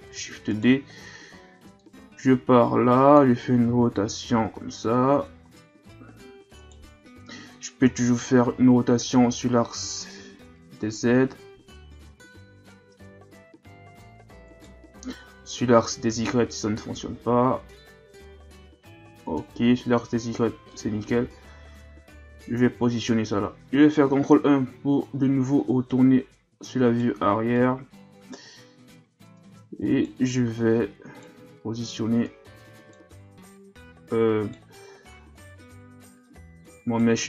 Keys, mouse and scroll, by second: 0.1 shift+d, 1.8-3.7 drag, 3.7 r, 7.9 KP_7, 8.7-9.8 shift+scroll up 4, 9.8 r, 15.4 r, 20.7-23.7 drag, 23.8 ctrl+KP_1, 25.0 scroll up 2, 25.9 right click, 27.5 right click, 29.4 right click, 30.6 right click, 32.3 right click, 33.5 right click, 35.4 right click.